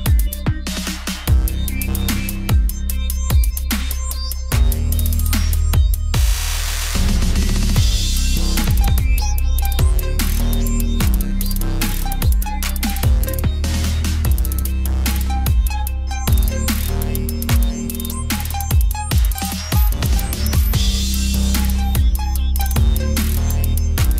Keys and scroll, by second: 13.1 ctrl+t, 22.7 ctrl+z.